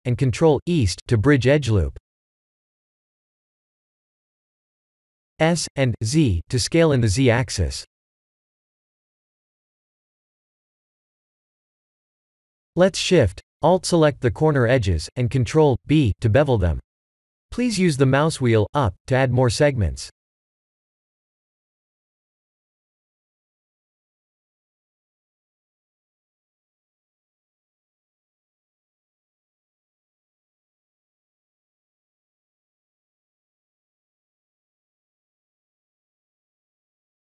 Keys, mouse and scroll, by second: 0.0 middle click, 2.4 Tab, 3.0 middle click, 3.7 s, 8.8 2, 9.0 Tab, 9.2 2, 10.2 alt+click, 10.9 middle click, 12.4 alt+shift+click, 13.1 middle click, 15.0 alt+shift+click, 16.5 ctrl+z, 17.5 alt+shift+click, 18.4 ctrl+z, 18.8 middle click, 18.9 middle click, 20.2 alt+shift+click, 21.2 ctrl+z, 21.4-21.8 scroll up 4, 22.8 alt+shift+click, 23.7 middle click, 25.8 alt+shift+click, 26.3 middle click, 27.2 KP_1, 27.5 KP_7, 27.9 shift+z, 28.5-29.0 scroll down 1, 29.0 scroll down 1, 29.2 ctrl+b, 34.3 Tab, 35.8 shift+z, 36.2 middle click.